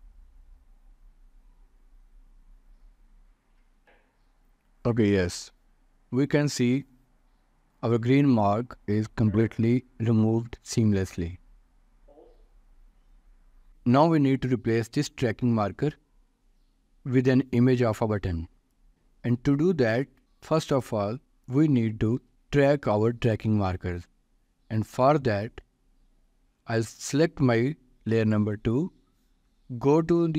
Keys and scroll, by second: 22.3 ctrl+s.